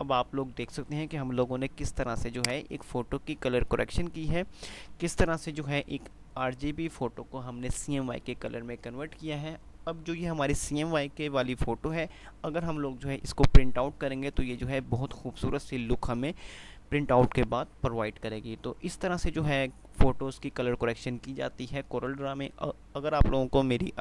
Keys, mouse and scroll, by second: 2.0 F2, 2.5-4.8 drag, 5.6 F9.